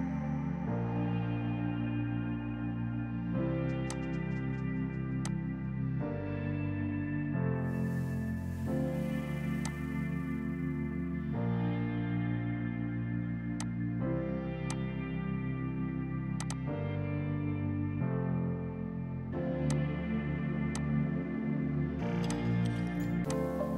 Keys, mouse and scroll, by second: 3.0 space, 3.2 Escape, 3.5 F3, 3.8 F2, 3.9 click, 4.0 right click, 5.2 click, 7.9 g, 9.6 click, 19.6 click.